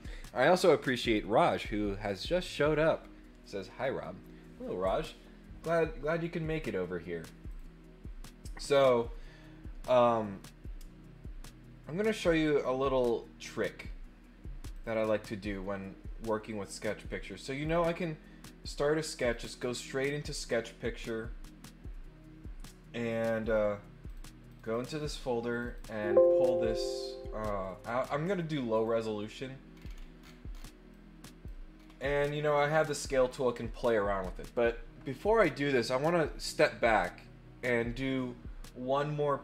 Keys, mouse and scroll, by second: 7.4 click, 14.7 click, 17.6 click, 19.2 click, 23.4 click, 24.0 click, 24.5 click, 25.5 click, 25.6 click, 28.7 click, 29.7-30.6 scroll down 6, 30.9 click, 31.7 scroll up 2, 32.7 click.